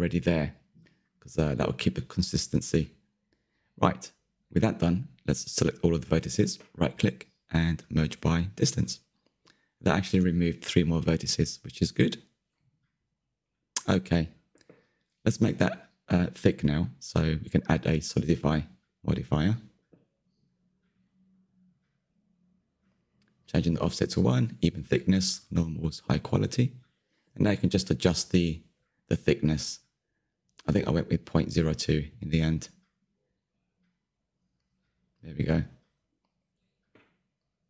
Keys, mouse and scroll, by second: 0.0 shift+middle click, 0.5 click, 0.8 m, 1.1 click, 1.3-3.0 shift+middle drag, 3.0-3.6 scroll down 3, 3.6-5.9 shift+middle drag, 5.9 a, 9.3-12.4 right drag, 12.4-14.1 shift+middle drag, 14.1 /, 15.4 click, 15.7-17.1 middle drag, 17.1 click, 17.6-20.6 shift+middle drag, 20.6-24.5 drag, 25.2-26.0 drag, 27.5-29.4 middle drag, 29.4-29.9 scroll up 4, 29.9-30.9 shift+middle drag, 30.9-34.9 scroll up 1, 34.9-35.9 drag, 35.9-36.3 scroll down 3, 36.3-37.6 middle drag.